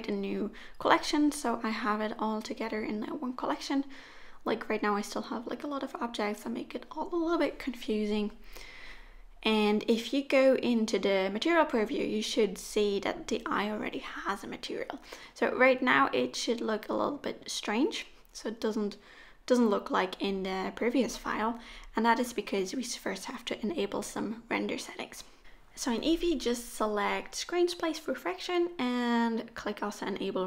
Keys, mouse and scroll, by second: 1.6 click, 2.3 click, 3.8-4.8 scroll down 1, 4.8 click, 4.8-5.9 scroll down 3, 6.2 shift+click, 6.8 middle click, 8.5 click, 10.0 middle click, 13.7 click, 13.7 middle click, 17.9 click, 19.8 click, 21.0 click, 22.0 click, 23.1 middle click, 24.3 middle click, 24.9 click, 26.0 click, 26.6 shift+click, 27.7 middle click, 28.7 r.